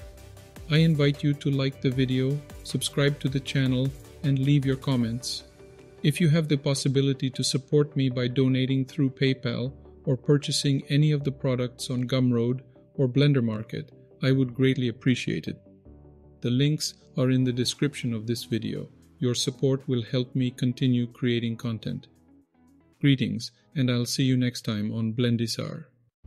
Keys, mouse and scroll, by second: 3.4 click, 5.2 click, 6.2 click, 18.7-19.6 scroll up 8, 19.6-21.9 scroll up 2, 21.9-25.1 scroll down 11, 25.1-26.1 scroll up 8.